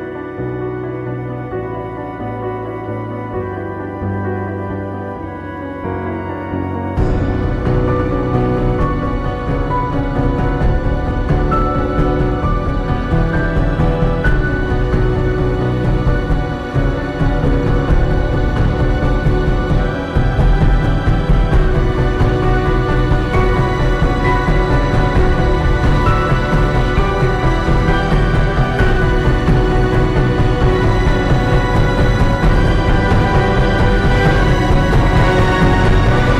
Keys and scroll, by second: 4.0-4.9 typing, 8.9 space, 11.8 [, 14.3 space, 15.2 [, 23.3 ctrl+t, 26.4 ctrl+d, 29.9 ], 33.3-34.3 typing.